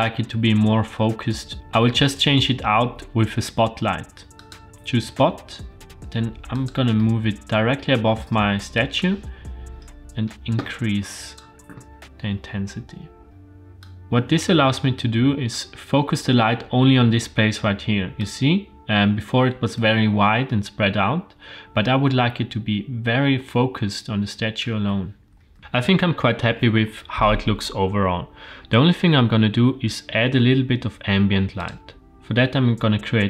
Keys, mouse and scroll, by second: 5.6 g, 7.0-7.8 middle drag, 8.7-11.4 drag, 13.3 click, 14.0-15.6 drag, 18.2-24.6 drag, 25.3 g, 28.7-29.2 scroll up 1, 29.4 shift+a.